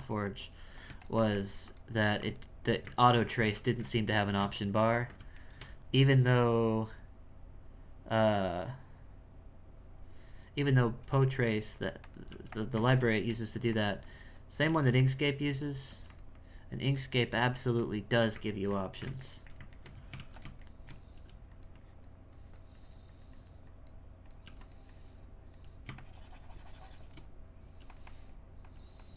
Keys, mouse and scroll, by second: 0.2-3.0 drag, 3.0-8.5 ctrl+shift+middle drag, 11.3 shift+middle click, 12.3 f, 12.9 ctrl+shift+middle click, 14.0 click, 15.1 click, 16.3-17.3 drag, 17.8 click, 18.6-20.1 ctrl+middle drag, 20.6 shift+middle click, 21.7-24.4 drag, 24.9-27.6 drag, 28.0-29.1 drag.